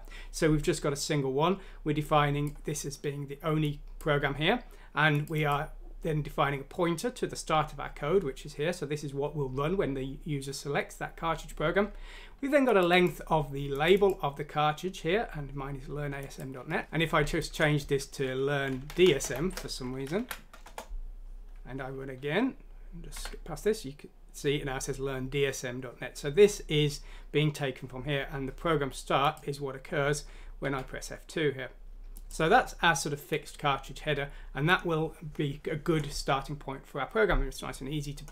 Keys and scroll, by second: 19.5 shift+d, 20.1 F6, 20.7 Return, 23.2 2, 30.6 2.